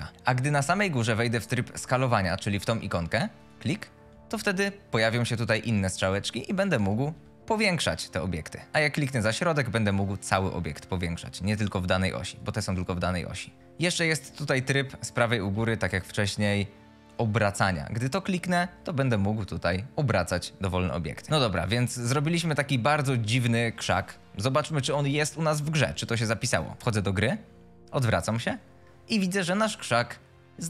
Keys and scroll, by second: 0.1 F22, 6.6-7.9 typing, 13.6 w, 15.4 F22, 19.2 F22, 21.3 r, 22.9-24.3 typing, 27.8 a, 28.3 w, 30.1 w.